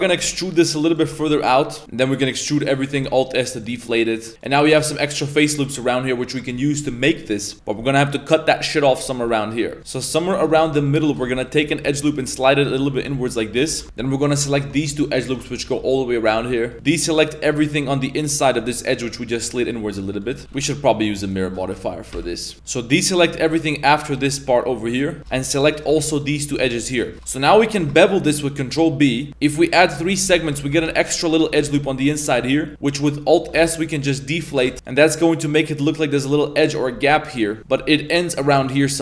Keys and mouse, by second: 7.5 middle drag, 8.3 middle click, 8.5 middle click, 8.9 shift+middle drag, 9.3-9.8 middle drag, 10.1 middle click, 10.5 shift+middle drag, 10.8 middle click, 11.0 shift+middle drag, 11.3 middle click, 11.6 g, 13.0 middle click, 13.6 2, 14.4 alt+z, 14.5 alt+right click, 15.2 alt+shift+right click, 16.1 middle drag, 16.1 z, 16.5 middle click, 16.7 z, 16.8-17.1 middle drag, 19.3-19.7 middle drag, 25.2 z, 25.2 c, 25.2 2, 25.5 shift+right click, 25.7 shift+right click, 26.3 shift+right click, 26.8 middle drag, 27.0 shift+middle click, 27.2 ctrl+b, 27.3 middle drag, 30.1 shift+middle drag, 30.4 z, 30.7 1, 31.1 alt+right click, 31.5 z, 32.1 shift+middle drag, 32.6 middle click, 32.9 middle click, 33.5 alt+s, 34.7 z, 34.7 Tab, 34.7 middle click, 35.1 middle drag, 36.1-36.8 middle drag, 37.1 middle click, 37.5 middle click, 37.9 middle click.